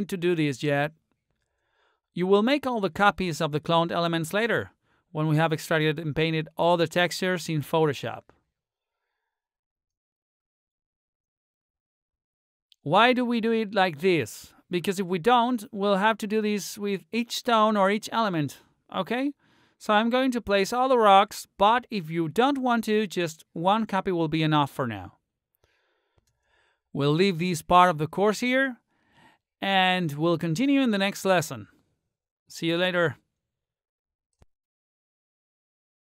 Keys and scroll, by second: 5.3 r, 27.7 r.